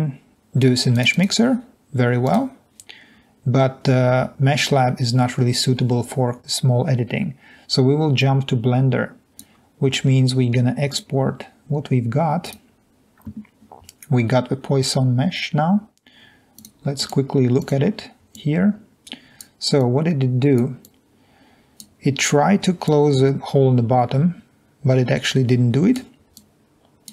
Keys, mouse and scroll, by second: 1.7 click, 1.8 click, 3.0 click, 3.4-3.9 scroll down 2, 8.9-10.1 drag, 19.1-19.5 drag, 20.5 drag, 21.7 click, 23.7 click, 26.5 click.